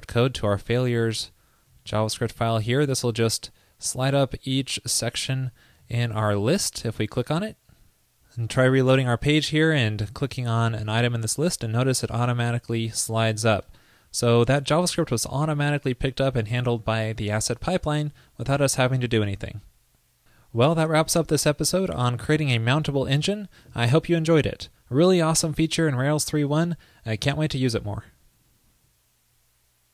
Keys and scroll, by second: 1.2 super+a, 1.8 super+v, 8.9 super+r.